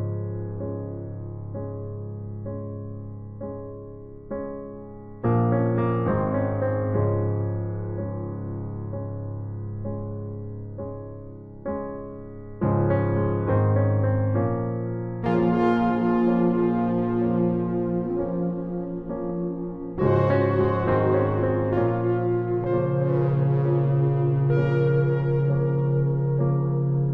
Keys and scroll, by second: 2.0 ctrl+t, 3.9 Return, 4.8 Down, 5.0 Down, 22.1 ctrl+t.